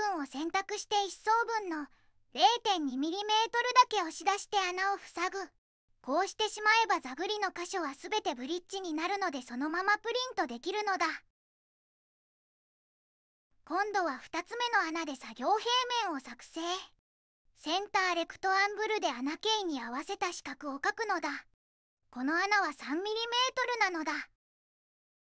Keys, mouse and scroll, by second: 1.4 click, 3.9 click, 6.3-7.4 typing, 7.4 Return, 9.5 right click, 10.0 click, 11.7 middle click, 13.1 click, 13.9 space, 17.4 click, 20.9 Tab, 21.9 3, 22.1 Tab, 22.5 3, 22.9 Tab, 24.7 click.